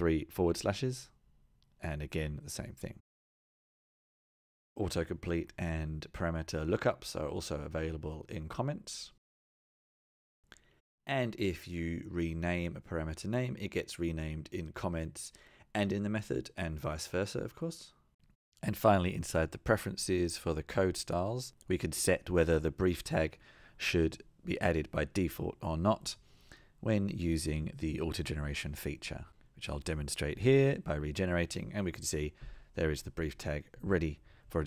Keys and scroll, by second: 0.3 super+z, 6.3 Tab, 10.9 Return, 15.1 shift+F6.